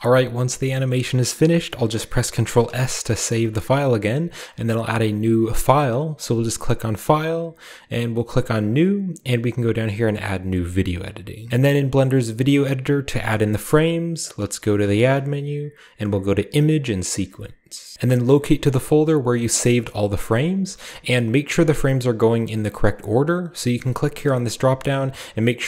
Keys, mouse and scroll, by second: 0.9-2.7 middle drag, 3.3 ctrl+s, 4.1-5.1 middle drag, 7.0 click, 11.5-13.5 middle drag, 13.7-15.1 middle drag, 14.8 shift+a, 19.3-20.1 drag, 20.5-23.3 scroll up 2, 24.3 click.